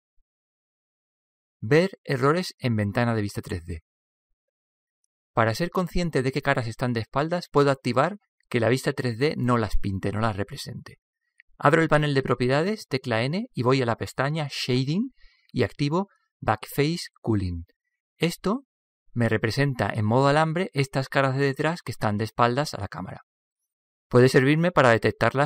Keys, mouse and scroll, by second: 2.0-3.8 drag, 12.7 n, 13.9-15.7 drag, 18.2-20.0 drag, 19.1 middle click, 20.0-21.2 middle drag.